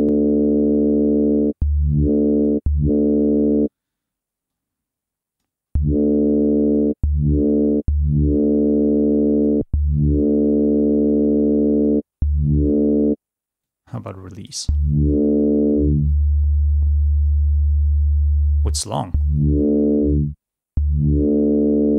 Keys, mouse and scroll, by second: 0.4-1.6 drag, 2.4 click, 4.6-5.8 drag, 6.5 click, 7.3 click, 9.0 click, 10.9-12.1 drag, 13.8 click, 16.1-17.5 drag, 18.5 click, 21.6 click.